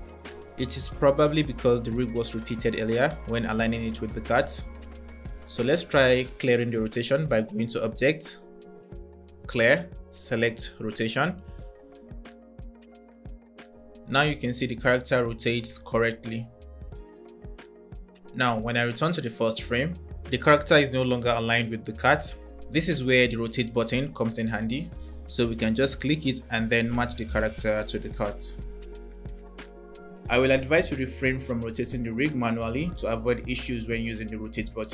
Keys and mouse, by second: 8.2-10.7 drag, 12.7 click, 16.9 click, 31.6 space, 34.2 drag.